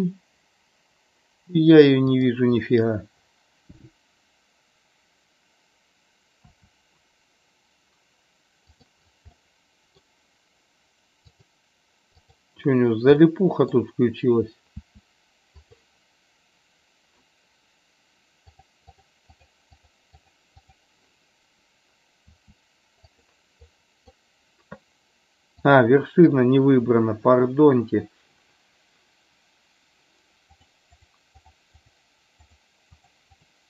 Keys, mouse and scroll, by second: 2.0 click, 9.3 middle click, 11.3 click, 13.0 middle click, 15.7 click, 18.5 click, 23.7 click, 25.7 click, 30.5 click, 31.4 drag, 32.9 click, 33.3 click.